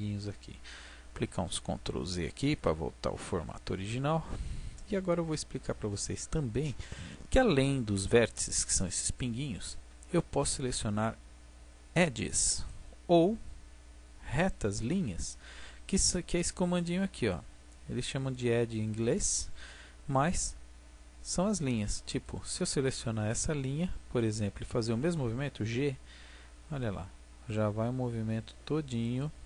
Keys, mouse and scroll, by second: 1.1 ctrl+z, 1.5 ctrl+z, 3.0 ctrl+z, 3.9 click, 12.5-14.3 drag, 22.1-25.8 right drag, 25.8 g, 29.1 click.